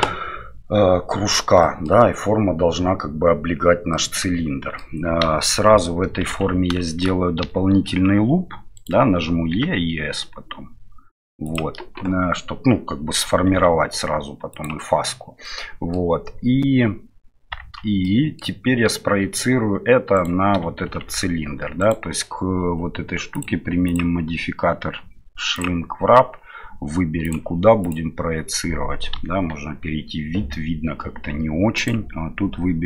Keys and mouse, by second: 1.6 middle drag, 5.2 KP_1, 6.3 Tab, 6.8 shift+middle click, 7.4 e, 13.5 s, 15.5 middle click, 17.6 Tab, 18.0-18.5 middle drag, 20.8 shift+z, 21.8 right click, 23.4-23.8 drag, 24.0-25.6 drag, 27.2 click, 29.1 KP_1, 31.7-32.8 drag.